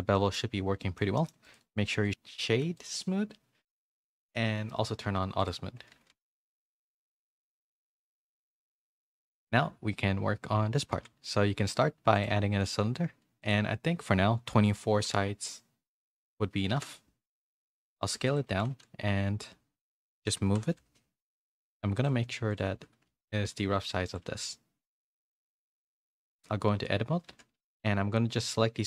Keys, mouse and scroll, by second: 0.1 middle click, 0.8 middle click, 1.1 shift+middle click, 2.0-3.3 right drag, 5.4 click, 6.3 middle click, 6.3 a, 7.4 click, 7.4 a, 8.3 KP_3, 9.2 a, 9.3 a, 10.9 shift+a, 13.4-16.8 drag, 18.2 s, 18.5 r, 21.5-27.5 typing, 26.1 Tab.